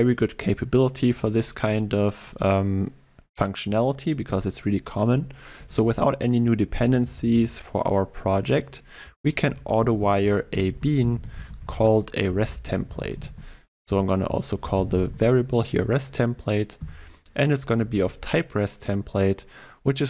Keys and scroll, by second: 10.8 Return, 11.3 ctrl+BackSpace, 16.9 Return, 17.9 ctrl+w.